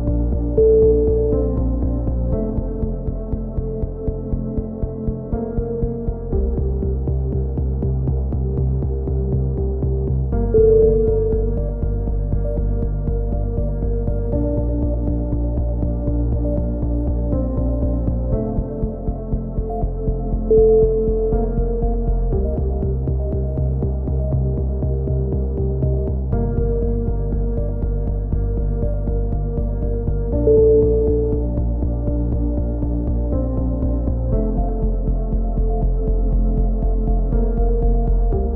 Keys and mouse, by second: 0.2 right click, 0.2 f, 0.5 a, 0.6 z, 0.7 middle click, 0.9 middle click, 2.0 z, 11.3 right click, 12.2-15.7 middle drag, 18.5 right click, 20.2-21.5 drag, 21.5 middle click, 22.2 c, 22.8-24.1 right drag, 23.3 click, 23.7 ctrl+z, 25.3 right click, 26.2 right click, 27.8 right click, 28.3 middle click, 28.6 click, 30.7-33.1 drag, 32.9 a, 34.2-35.2 middle drag, 35.2-36.6 drag, 35.2 right click, 37.3-38.5 right drag.